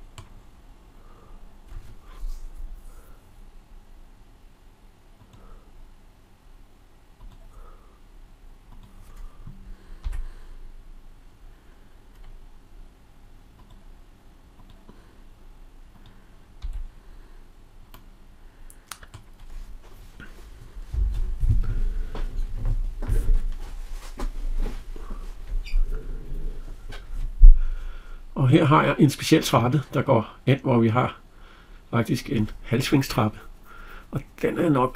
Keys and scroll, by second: 9.8 Escape, 16.5 Escape.